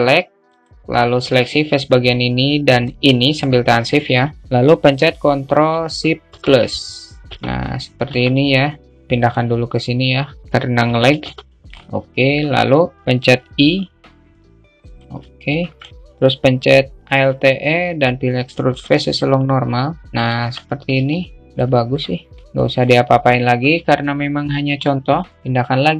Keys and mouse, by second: 0.2 click, 2.4 shift+click, 14.9 alt+i, 15.2 alt+middle click, 20.6 alt+Tab, 20.7-22.2 alt+middle drag, 22.4 alt+middle click.